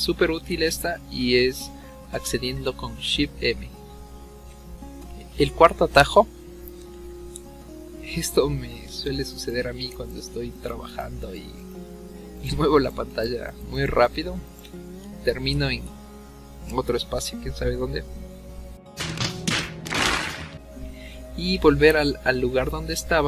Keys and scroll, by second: 1.2 v, 2.1 shift+m, 4.4 ctrl+z, 4.4 v.